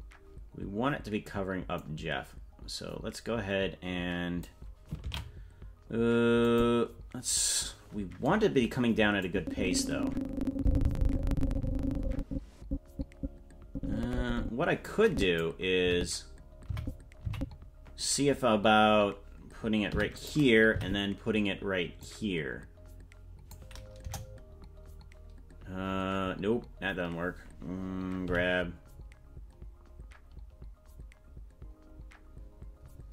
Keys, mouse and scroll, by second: 1.8-4.5 drag, 5.4 ctrl+z, 6.5 click, 9.2-15.5 drag, 15.9 Right, 16.7 Right, 17.3 Left, 19.9 i, 20.8 Right, 22.0-23.5 drag, 24.0 KP_0, 28.3 g.